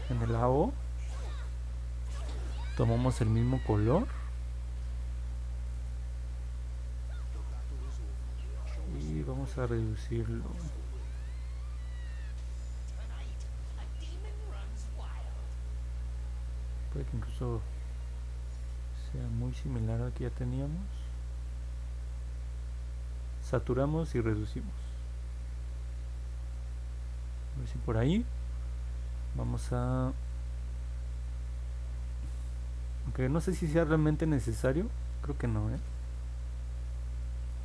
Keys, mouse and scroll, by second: 25.7-27.6 drag.